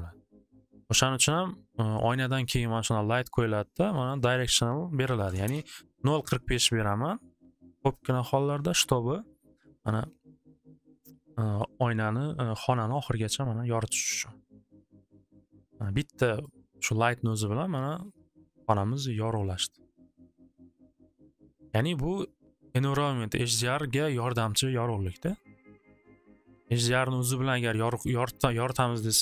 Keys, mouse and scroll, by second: 1.3-3.3 drag, 4.3 click, 4.9-5.8 typing, 5.0 click, 6.3 click, 8.2 typing, 9.9 Return, 16.4 click, 16.8 click, 21.7 click, 23.7-29.2 drag.